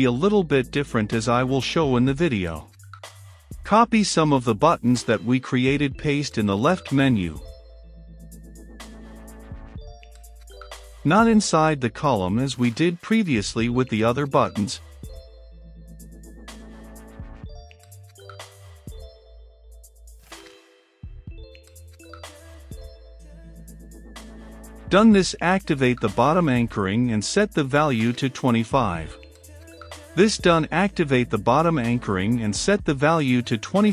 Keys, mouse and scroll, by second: 8.3 ctrl+c, 11.0-14.8 drag, 15.0 ctrl+v, 18.6-22.7 middle drag, 22.7-33.9 drag.